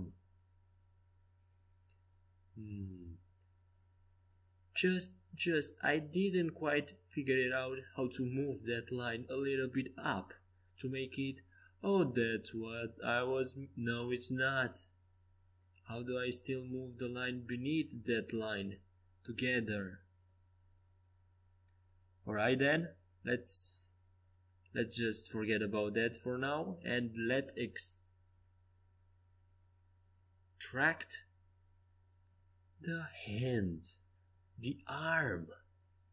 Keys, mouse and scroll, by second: 0.6 g, 3.7 a, 6.7 KP_5, 7.2 KP_5, 8.5 KP_3, 11.1 click, 12.0-13.2 drag, 12.2 c, 14.1-16.1 drag, 16.1 ctrl+z, 17.3 a, 23.4-25.2 right drag, 25.4-27.7 drag, 26.0-27.7 right drag, 26.7 Tab, 27.7 Tab, 28.1 KP_5, 30.4-33.0 typing.